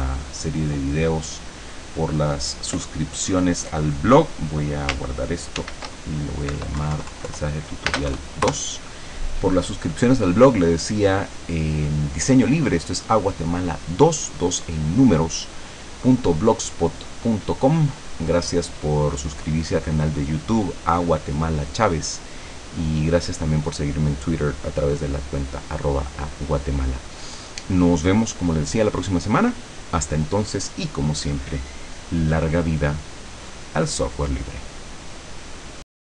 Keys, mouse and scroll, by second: 5.6 ctrl+shift+s, 6.5 End, 6.8 BackSpace, 7.9 space, 8.1 KP_2, 8.5 KP_Enter.